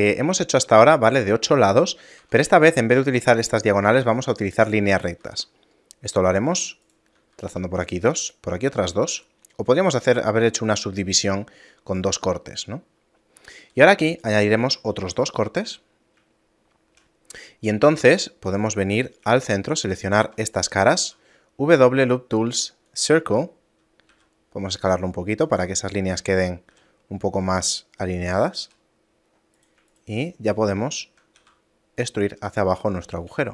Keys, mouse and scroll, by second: 0.2 middle click, 0.5-0.9 scroll down 1, 1.6 scroll up 1, 2.2 Tab, 2.2-3.4 scroll up 5, 5.2 ctrl+r, 9.0 a, 13.6 ctrl+r, 15.7 a, 16.5 shift+middle click, 17.3 scroll up 1, 18.0 ctrl+Tab, 18.0 scroll up 3, 18.9 right click, 19.4 shift+right click, 21.0 w, 24.1 s, 26.7 s, 28.6 a, 29.3-29.9 scroll up 2, 29.5 right click, 29.9 shift+right click, 30.8 shift+middle click, 31.4 e, 32.4 shift+middle click.